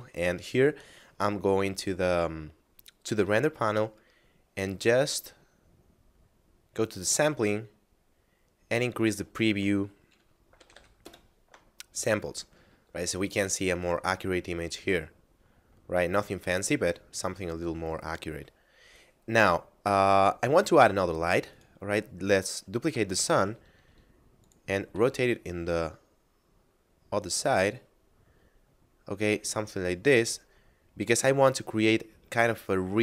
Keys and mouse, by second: 3.9 middle click, 6.7 click, 7.5 middle click, 9.1 click, 10.4 5, 11.0 Return, 17.3 middle click, 21.5 right click, 22.7 shift+d, 23.3 x, 24.4 click, 24.9 r, 25.1 z, 30.1 click.